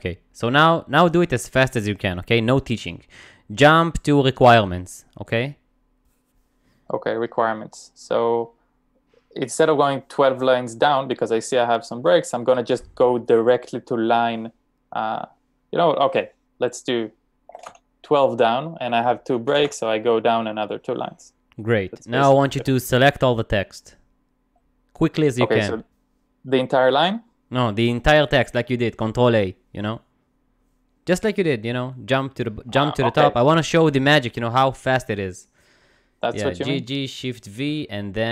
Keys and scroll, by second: 17.3-18.2 typing, 19.5-20.2 typing, 33.5-36.6 typing.